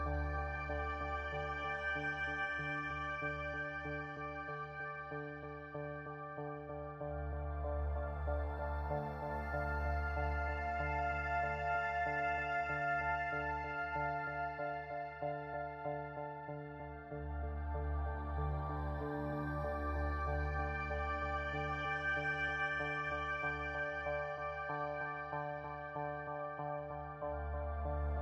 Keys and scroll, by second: 9.4 space, 14.8 space, 19.0 space, 20.2 space, 22.9 space, 24.1 space.